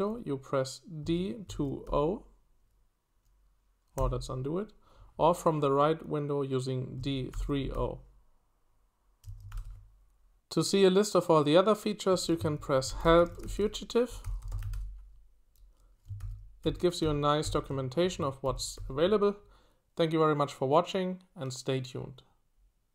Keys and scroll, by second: 0.8-2.3 typing, 3.9 typing, 6.7-8.2 typing, 9.5 w, 12.3-15.2 typing, 16.2 ctrl+d, 16.6 ctrl+d, 17.0 ctrl+d, 18.4 ctrl+d, 18.7 ctrl+d.